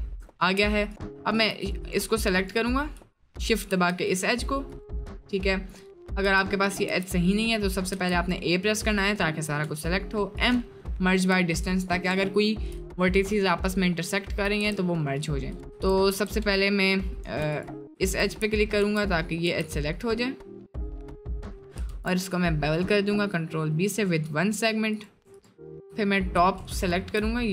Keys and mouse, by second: 0.5 2, 1.4 alt+click, 1.8 click, 3.2 alt+shift+click, 4.0 g, 5.7 middle click, 6.3 1, 6.9 g, 7.9 a, 9.6 m, 11.3 Tab, 11.8 middle click, 12.3 shift+middle click, 12.9 middle click, 13.5-14.0 middle drag, 14.3-14.7 shift+middle drag, 14.7 Tab, 17.2 2, 17.5 alt+click, 18.9 g, 19.5 g, 21.9 ctrl+b, 25.3 alt+click, 27.4 middle click.